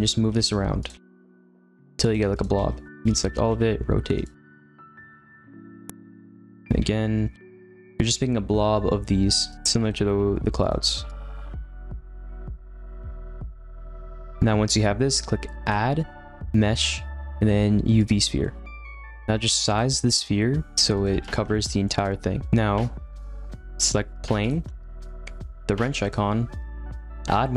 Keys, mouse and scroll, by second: 0.2 shift+d, 0.9 r, 2.0-3.2 typing, 4.3-6.1 typing, 5.8 ctrl+z, 6.5 ctrl+z, 6.8 ctrl+z, 7.4 g, 7.7 r, 9.7-13.8 typing, 12.3 click, 12.4 middle click, 12.4 scroll down 2, 12.5 middle click, 12.7 ctrl+z, 12.8 ctrl+z, 12.9 ctrl+z, 12.9 middle click, 13.9 middle click, 14.1 click, 14.2-18.0 middle drag, 18.0-18.4 drag, 18.4-19.0 middle drag, 19.0 g, 20.7 s, 21.1 g, 21.8 alt+middle click, 21.9 alt+middle click, 22.4-24.5 middle drag, 24.5 click.